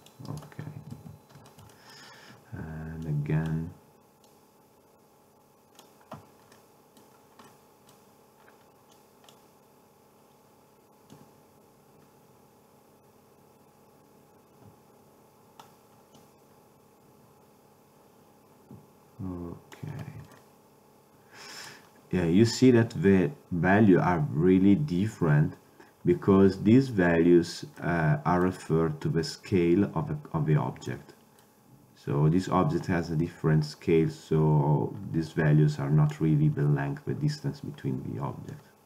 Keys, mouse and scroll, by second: 0.5-2.0 drag, 1.0 ctrl+Tab, 3.1 click, 4.6-6.2 drag, 6.6 middle drag, 9.0-10.9 drag, 11.2-13.1 drag, 16.3-18.1 drag, 20.5-21.6 middle drag, 29.8-31.0 middle drag, 32.8-35.4 middle drag, 35.4-37.1 drag, 38.6-38.8 drag.